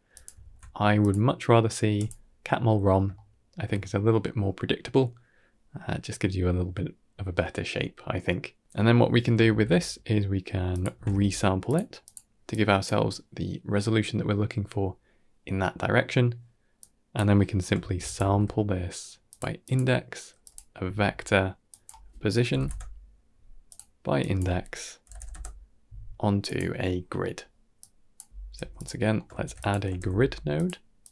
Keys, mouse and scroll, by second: 0.0 drag, 0.3 ctrl+x, 0.9-2.8 drag, 3.0-3.4 shift+middle drag, 6.0-8.0 middle drag, 9.3 shift+a, 12.4 click, 16.7 click, 17.2 middle click, 17.7 shift+a, 20.7-23.6 drag, 24.1-26.4 drag, 26.8 scroll down 2, 27.1 middle click, 27.7 click, 28.5 g, 28.9 middle click, 29.2 shift+a.